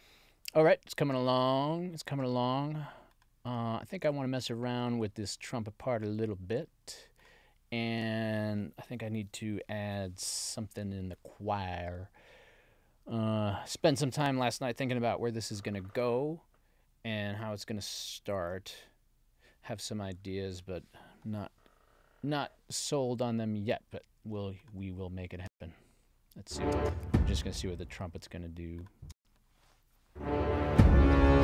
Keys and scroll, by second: 25.4 space, 26.7 space, 29.0 space.